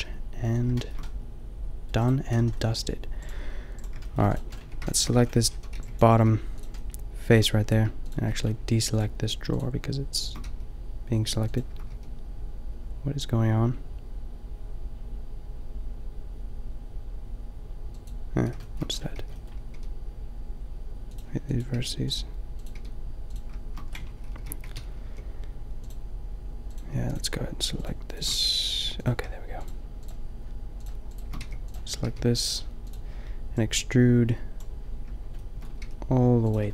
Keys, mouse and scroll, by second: 2.0-3.2 middle drag, 2.3 a, 3.8 a, 4.7 Tab, 5.2 a, 5.6 a, 5.8 b, 6.2 g, 10.4 g, 11.9 g, 13.3 click, 18.1-19.7 middle drag, 19.2 b, 19.7 g, 21.5 click, 21.8 g, 23.0 g, 24.4 ctrl+l, 25.1 g, 28.4 g, 31.4 g, 32.1 g, 34.7 click, 35.8 g.